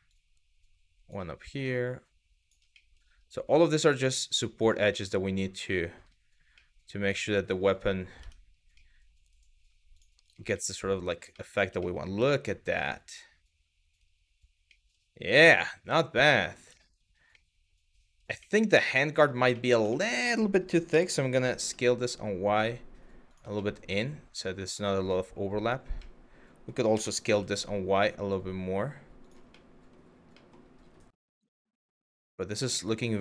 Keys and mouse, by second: 1.2 click, 2.5 middle click, 3.2 click, 4.5-5.7 middle drag, 6.2 middle click, 6.8 shift+middle click, 7.8 Tab, 8.5 middle click, 9.8 click, 10.2-10.7 middle drag, 11.0 middle drag, 11.5 shift+middle click, 11.9-13.6 middle drag, 14.4 middle drag, 15.1 shift+middle drag, 15.6-16.2 middle drag, 16.5 shift+middle click, 17.1-17.9 middle drag, 18.1 middle click, 18.7 click, 19.3 middle click, 19.6 shift+middle drag, 20.5 s, 21.2 y, 22.9 click, 23.3-24.4 middle drag, 25.7-26.3 middle drag, 26.6 s, 26.9 y, 28.8 click, 29.1-29.6 middle drag, 30.1 middle drag, 31.4 shift+middle drag, 32.0 middle drag, 32.4 shift+middle drag, 33.0-33.2 middle drag.